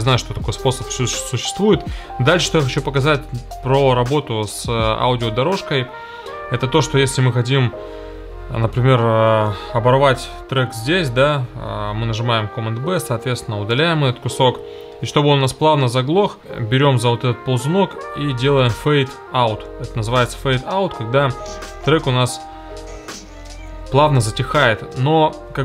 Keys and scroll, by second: 11.2 super+b, 13.7 BackSpace, 21.2 space, 22.4 space, 24.1 space.